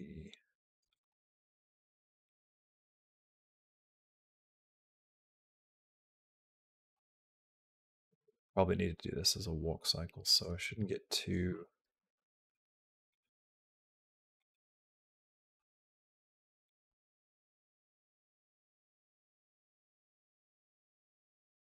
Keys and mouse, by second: 0.9 g, 3.1 click, 4.8 g, 6.8 g, 10.4 g, 11.8 g, 15.4 r, 16.7 g, 20.3 click.